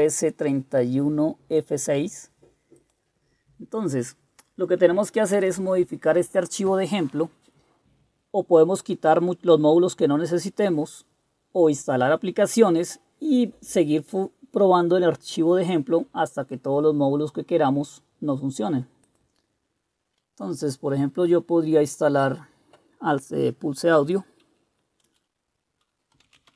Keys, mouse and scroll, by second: 25.1 Return, 25.9-26.5 typing.